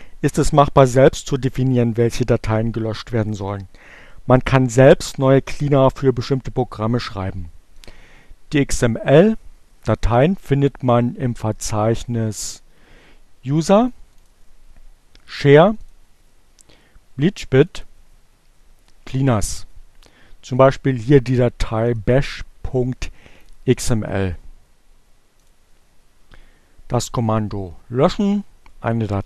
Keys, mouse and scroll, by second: 6.4-7.7 drag, 12.6 click, 14.4 click, 16.3 click, 18.1 click, 19.6 click, 21.0 click, 21.8 right click, 22.6 click, 25.5 click.